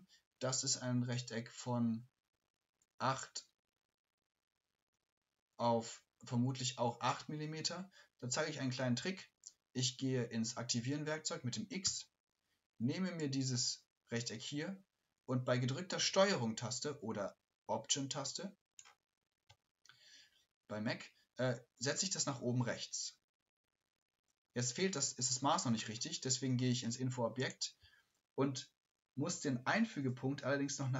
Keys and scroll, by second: 16.1 shift+v.